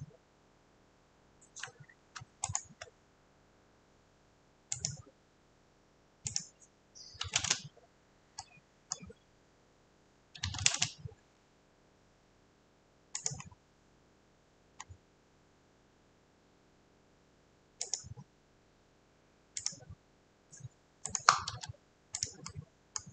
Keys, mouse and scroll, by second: 2.6 shift+middle click, 7.1 scroll, 8.6 right click, 8.6 scroll, 8.6 c, 9.0 click, 10.2-11.1 typing, 11.4 click, 11.4 click, 11.5 click, 13.3 click, 13.5 scroll, 14.7 scroll, 17.9 click, 19.7 click, 21.2 shift+right click.